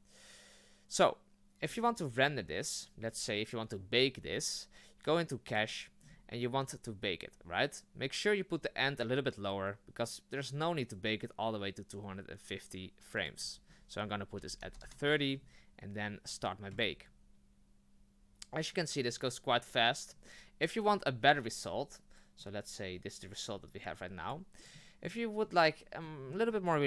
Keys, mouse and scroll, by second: 22.4-24.7 drag, 24.7-25.4 middle drag, 25.4-26.0 scroll up 1, 26.0-26.5 shift+middle drag, 26.5 scroll up 1.